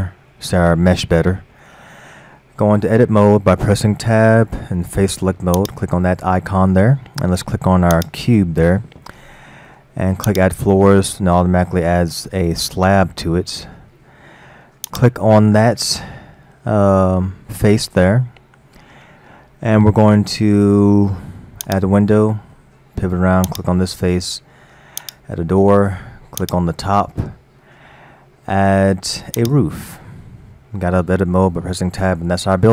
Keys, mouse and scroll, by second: 0.3-3.3 middle drag, 3.6 Tab, 5.6 click, 7.1 middle click, 7.9 click, 10.3 click, 11.1 middle click, 12.0-13.9 scroll up 3, 13.9 middle click, 14.9 click, 15.9-19.0 middle drag, 21.7-22.1 drag, 22.5 middle click, 23.5 click, 25.0 drag, 25.7 middle click, 26.4 click, 29.4 click, 31.4 Tab, 31.9-32.7 middle drag.